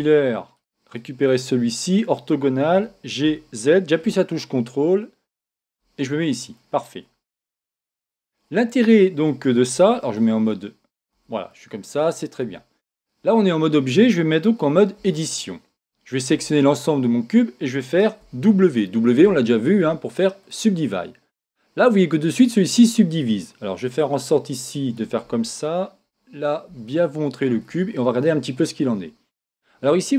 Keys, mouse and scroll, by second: 0.5-2.1 right drag, 2.7 g, 5.9-7.4 drag, 7.2-13.2 middle drag, 7.5 Tab, 9.7 z, 11.1 a, 12.4 Tab, 15.0 Tab, 16.3 a, 18.2 w, 24.0-25.9 drag, 26.0-28.8 middle drag, 29.5-30.1 middle drag.